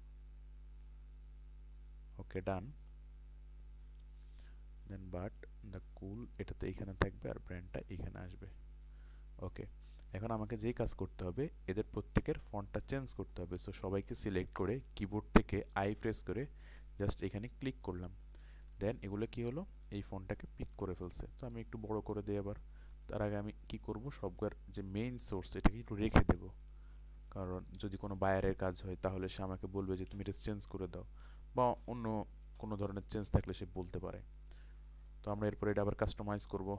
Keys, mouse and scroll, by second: 10.1 ctrl+space, 10.2 click, 13.4-14.3 scroll up 1, 15.0 i, 16.6 click, 20.4 ctrl+space, 20.5 click, 21.9 alt+shift+click, 22.5 ctrl+space, 22.6-24.4 drag, 24.6 alt+click, 25.6 click, 26.0 ctrl+click, 27.2 ctrl+space, 27.3 ctrl+click, 30.3 ctrl+shift+o, 32.0 click, 32.6 click, 33.0 ctrl+click, 35.6 click.